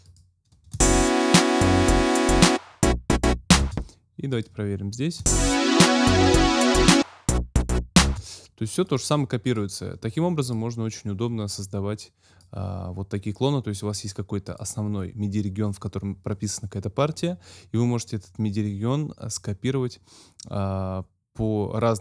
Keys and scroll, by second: 0.7 space, 3.6 space, 5.2 space, 8.0 space.